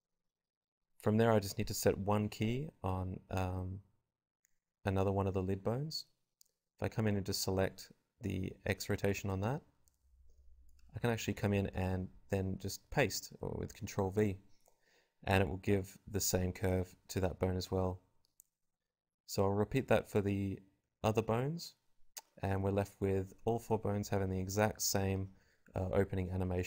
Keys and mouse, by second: 0.4 shift+Left, 1.4 i, 5.9 click, 6.1 v, 7.0-8.4 drag, 9.3 click, 9.7-12.9 drag, 13.7 click, 13.7 i, 14.3 click, 14.6 v, 15.5 ctrl+v, 16.1 click, 16.6 right click, 17.2 ctrl+c, 17.9 ctrl+v, 18.7-19.7 drag, 18.7 l, 18.9 g, 19.7 ctrl+z, 19.9 ctrl+z, 20.0 click, 20.2 x, 20.7 click, 21.7 l, 21.9 ctrl+c, 22.4 i, 23.1 i, 24.0 Delete, 24.5 Delete, 24.9 ctrl+v, 26.3 click.